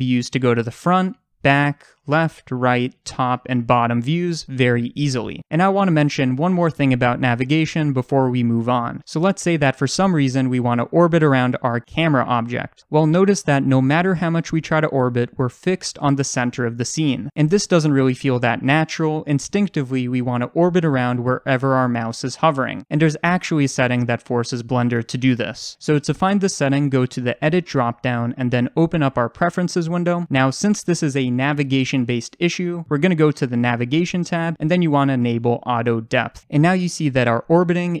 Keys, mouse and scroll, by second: 11.6 click, 14.2-27.3 middle drag, 27.3-35.9 drag, 37.7-38.0 middle drag.